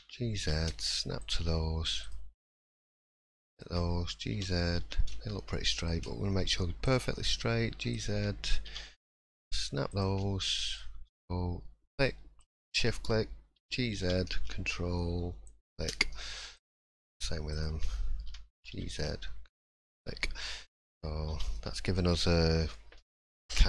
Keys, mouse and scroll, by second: 2.0 click, 3.5 shift+click, 4.3 g, 6.8 click, 7.9 shift+click, 8.7 g, 10.6 click, 12.4 shift+click, 13.5 g, 16.5 click, 17.5 shift+click, 18.3 g, 20.0-20.4 scroll down 4, 20.3-20.6 scroll up 3, 21.3 3, 21.5 middle click, 22.0 scroll down 1, 22.7 shift+scroll down 1, 22.7 shift+middle click, 23.5-23.6 scroll up 1.